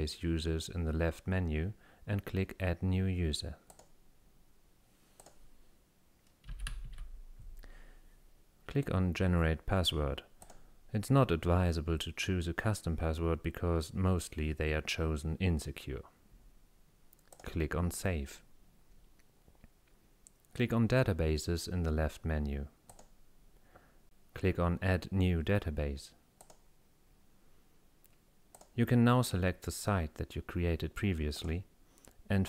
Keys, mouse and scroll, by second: 3.7 click, 5.2 click, 6.3-7.4 typing, 10.5 click, 17.4 click, 22.9 click, 26.4 click, 28.6 click, 31.4 click.